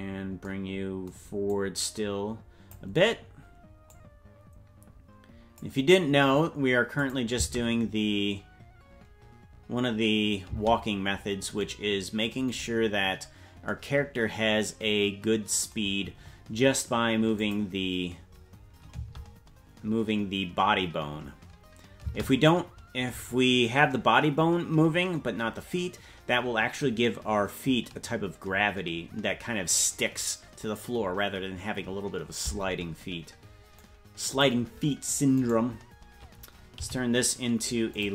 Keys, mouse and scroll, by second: 1.4-2.8 drag, 3.9-5.6 drag, 6.9 click, 7.3 space, 11.1-11.5 scroll up 3, 11.1 space, 17.3 click, 18.9 space, 22.4 space, 33.7 click, 35.3-36.7 right drag, 36.7 t.